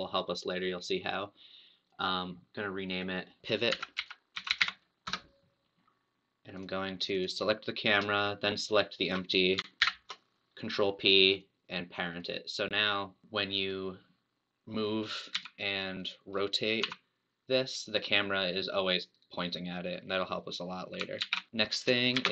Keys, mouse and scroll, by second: 1.8 click, 2.9-5.0 drag, 6.6 click, 7.3 click, 8.7 shift+click, 9.8 ctrl+p, 12.1 click, 13.5 click, 15.4 g, 16.9 r, 21.2 alt+g, 21.5 middle click, 22.1 shift+a.